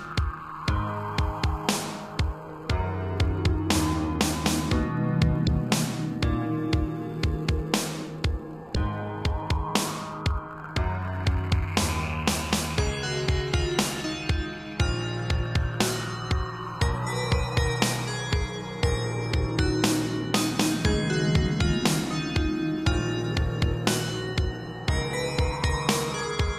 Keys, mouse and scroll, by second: 0.1-0.6 scroll down 2, 1.0 click, 1.2 click, 2.4 7, 3.9 g, 5.8 click, 5.8 click, 6.8 click, 6.9 click, 8.6 b, 8.8 click, 10.7 shift+click, 10.8 shift+click, 12.6 shift+click, 13.1 shift+click, 13.2 scroll up 3, 14.0 shift+click, 14.8 g, 15.4 Escape, 16.3 shift+click, 17.2 g, 21.4 click, 21.4 click, 21.9 middle click, 22.6 scroll down 2, 22.8 middle click, 24.2 shift+middle click, 24.6 middle click, 24.8 7, 26.1 middle click.